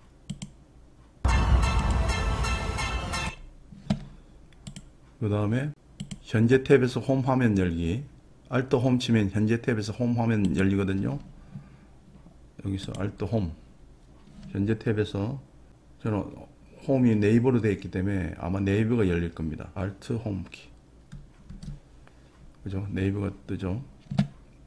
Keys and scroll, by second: 21.5 alt+Home.